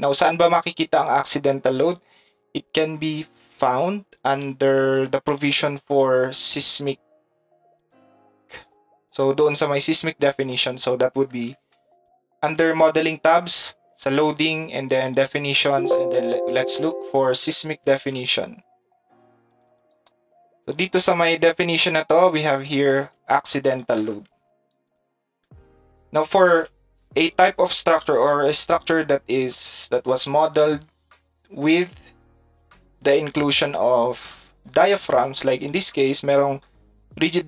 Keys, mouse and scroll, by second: 0.4 click, 1.0 click, 3.3 middle click, 4.2 click, 5.4 click, 7.8 click, 9.1 click, 10.3 click, 12.0 ctrl+shift+click, 19.5 right click, 19.7 right click, 20.2 right click, 20.4 right click, 20.7 right click, 20.9 click, 29.9 click, 32.7 click, 34.1 click, 35.7 click.